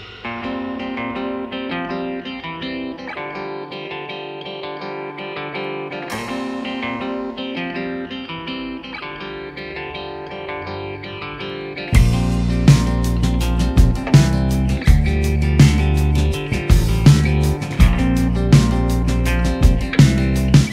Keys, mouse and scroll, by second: 0.8 Tab, 11.6 space, 11.7 double click, 14.6 ctrl+0, 16.3 Tab, 18.9 ctrl+s.